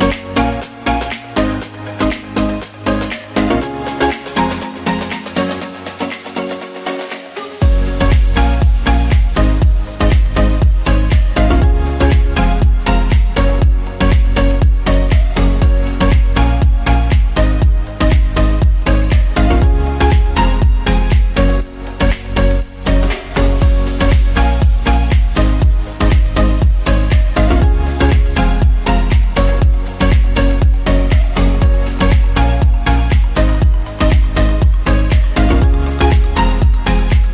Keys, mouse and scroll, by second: 7.3 ctrl+b, 10.2 ctrl+z, 11.0 ctrl+b, 13.6 5, 13.9 Return, 23.2 ctrl+b, 34.5 s, 34.8 x.